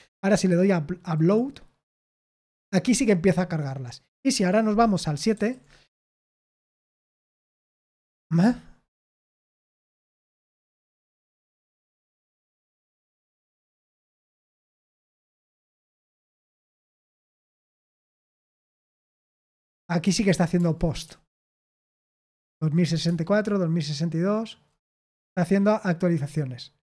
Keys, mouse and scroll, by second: 1.1 click, 5.3 super+7, 7.5-9.4 scroll down 1, 9.4 scroll down 1, 10.0 space, 10.9 space, 12.6 space, 14.1 space, 15.3 space, 16.1 space, 17.0 space, 18.3 space, 18.7 space, 20.0 space, 20.5 space, 21.0 space, 21.4 space, 23.0 space, 23.4-24.3 space.